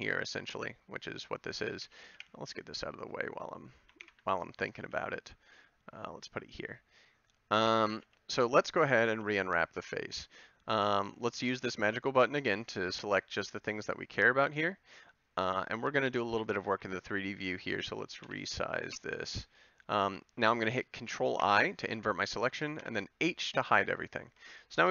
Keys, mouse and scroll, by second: 1.8 a, 2.1 b, 4.0 ctrl+l, 4.8 g, 8.0 a, 9.1 b, 12.8 a, 13.2 b, 17.3-19.2 middle drag, 21.4 ctrl+i, 22.8 h.